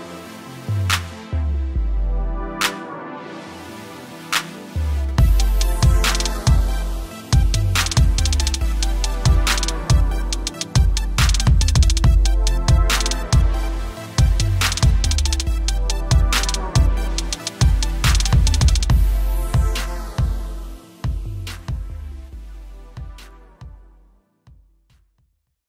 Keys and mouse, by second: 4.8 Right, 5.2 BackSpace, 6.7 Escape, 7.6 click, 8.0 t, 8.7 click, 9.7 Return, 10.1 v, 10.2 Down, 13.0 click.